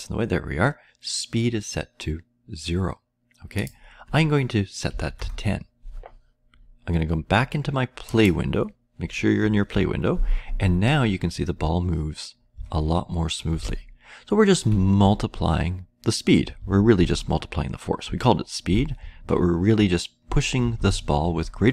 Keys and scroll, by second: 4.9 typing, 9.7-10.6 Left, 11.1 Left, 11.1-12.5 Right, 12.5-13.5 Left, 13.5-14.6 Down, 15.1 Down, 15.4-16.5 Up, 17.5-18.8 Down, 18.8 Left, 19.8 Up, 19.8 Right.